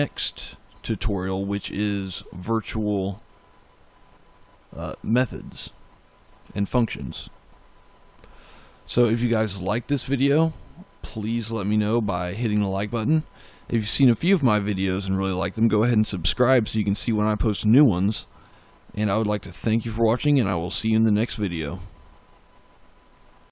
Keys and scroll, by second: 11.9 f.